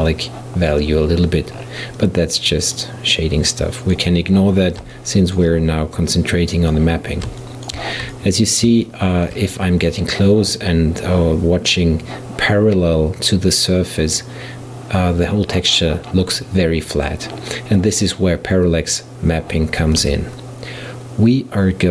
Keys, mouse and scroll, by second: 0.1-0.4 scroll up 3, 1.6-2.5 scroll down 5, 2.7 click, 3.2-5.0 drag, 5.0-6.0 shift+middle drag, 6.0 click, 7.4-11.9 shift+middle drag, 20.0 shift+a.